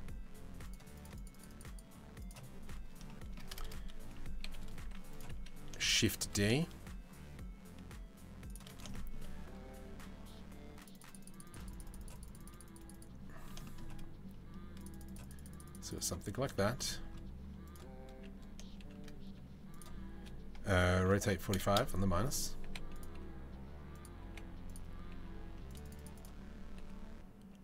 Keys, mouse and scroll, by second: 0.2 right click, 0.5 right click, 0.7 right click, 1.9 right click, 2.6 shift+middle click, 4.0 KP_7, 4.4 z, 5.4 shift+d, 8.5 shift+middle drag, 10.4-12.6 drag, 13.2 shift+middle click, 14.5-15.7 drag, 16.1 shift+middle click, 18.4 shift+d, 20.6 r, 22.2 g, 22.7 r, 23.8 g, 25.4 click, 26.3 r, 27.5 shift+middle drag.